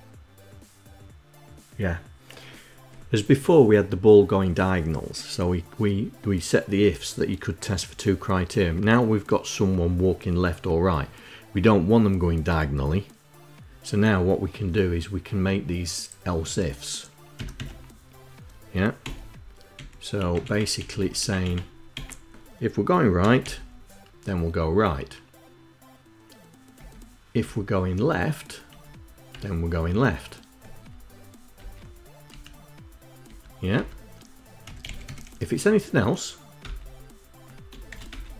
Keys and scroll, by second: 17.2 Tab, 17.4 Tab, 18.9 Delete, 19.6 Delete, 20.0 Delete, 20.3 Delete, 20.6 Delete, 20.8 Delete, 21.3 Delete, 21.7 Delete, 22.8-23.7 typing, 26.6 Down, 27.2 Down, 28.5 Tab, 29.1 Tab, 31.4 Return, 32.1 Up, 33.1 Tab, 33.6 Tab, 34.2-35.4 typing, 36.4 Return, 37.7 shift+', 37.9 Return.